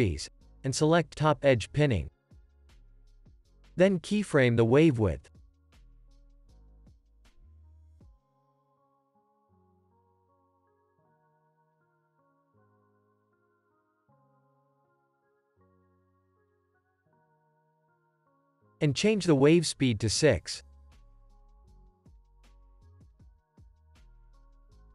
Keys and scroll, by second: 0.2 Return, 3.4 ctrl+z, 5.0 u, 10.4 8, 12.1 x, 14.1 Return, 16.2 space, 18.2 ctrl+s, 20.0 6, 20.4 Return.